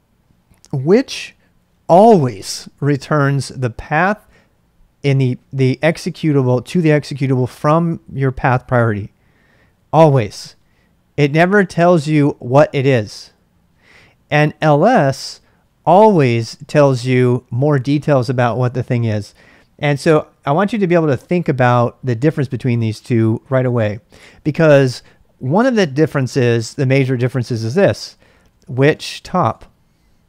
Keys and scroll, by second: 28.2-29.8 typing.